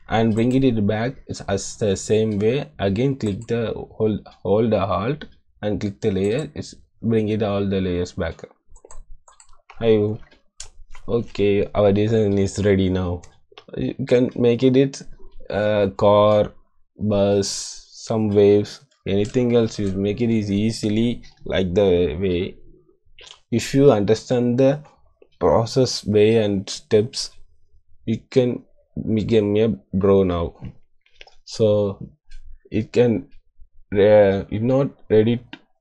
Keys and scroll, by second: 19.5 =.